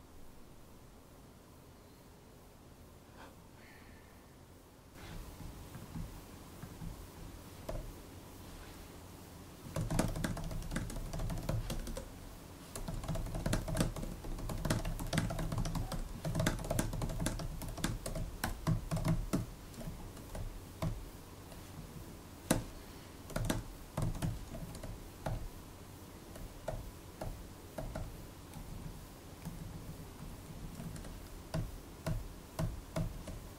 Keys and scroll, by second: 7.5 super+n, 9.4-19.7 typing, 19.7 alt+shift+Left, 20.7 super+i, 21.6 Right, 21.8-24.6 typing, 25.1 super+b, 26.5 super+b, 27.1 super+b, 27.6 super+b, 28.4 Right, 28.6 Right, 28.7 Right, 29.4 alt+Left, 29.5 alt+Left, 29.6 alt+Left, 30.1 alt+Right, 30.7 alt+shift+Right, 31.4 super+i, 31.9-32.4 typing.